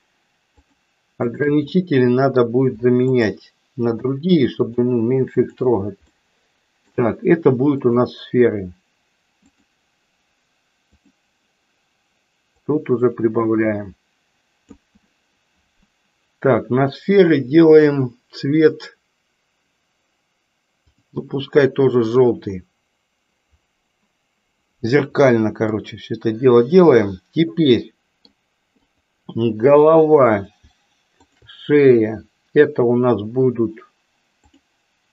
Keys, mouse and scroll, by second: 1.3 shift+click, 1.9 middle click, 3.0 shift+click, 4.0 shift+click, 4.7 shift+click, 5.4 shift+click, 6.3 middle click, 7.8-9.8 drag, 12.9-14.6 drag, 22.0 click, 25.8-28.3 middle drag, 28.8 click, 34.5-35.1 drag.